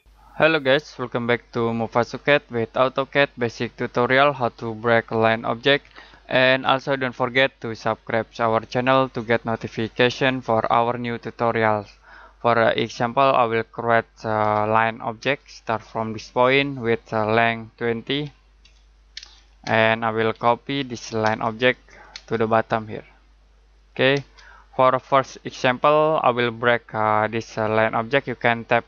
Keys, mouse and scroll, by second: 12.8 click, 14.4 l, 15.2 space, 16.3 click, 18.1-22.1 typing, 21.5 click, 22.3 click, 24.2 space, 24.5 middle click, 28.7-28.8 typing.